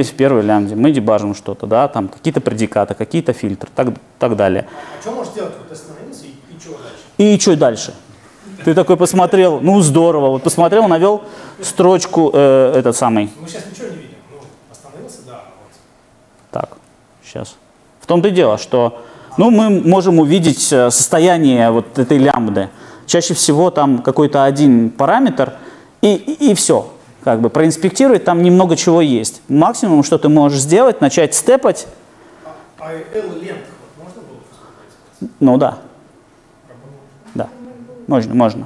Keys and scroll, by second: 32.1 F7, 35.3 F7.